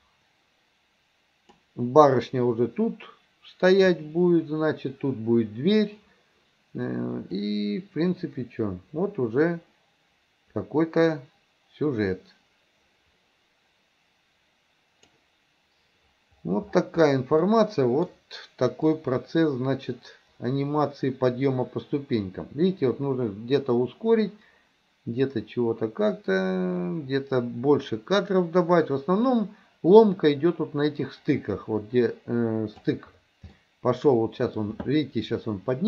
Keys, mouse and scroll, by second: 7.5-15.3 drag, 17.5 middle click, 19.0-33.0 drag, 33.6 middle click.